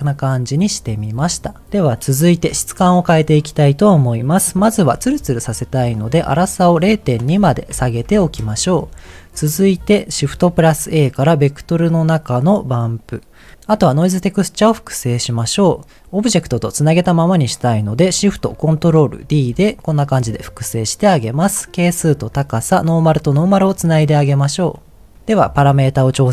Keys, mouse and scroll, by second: 0.6 middle click, 0.8-1.6 scroll down 3, 6.3 click, 7.0-8.2 drag, 10.4 shift+a, 13.1-13.5 scroll down 1, 13.5 middle click, 19.2 ctrl+shift+d, 20.7 click, 21.6 click, 22.9 click, 24.1 click, 24.6 click, 24.9 click, 25.1 middle click, 25.1 scroll up 2.